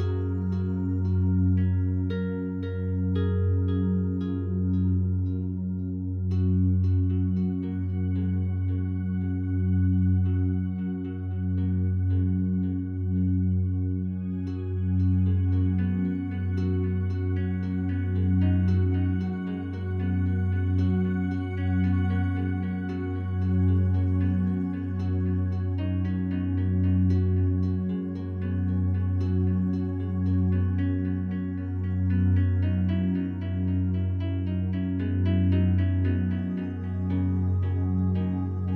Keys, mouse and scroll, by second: 0.1 click, 0.9 ctrl+alt+click, 1.4 ctrl+alt+click, 2.3 alt+click, 2.7 ctrl+alt+click, 3.9 alt+shift+click, 4.4 alt+shift+click, 5.5-6.8 alt+drag, 6.9-7.9 drag, 8.0 click, 8.3 click, 9.2 ctrl+alt+click, 9.5-10.0 alt+drag, 10.6 alt+shift+click, 11.1-17.6 alt+shift+drag, 18.1 ctrl+alt+click, 19.3 1, 19.9 alt+shift+click, 20.3 ctrl+alt+click, 21.2 1, 22.3 ctrl+alt+click, 23.0-24.2 ctrl+alt+drag, 24.3 click, 25.2 click, 26.1 ctrl+alt+shift+click, 26.6 alt+shift+click, 29.1 click, 30.8 click, 31.2 click, 31.8 click, 33.5 click, 34.2 click, 35.5-36.1 drag, 36.1 g.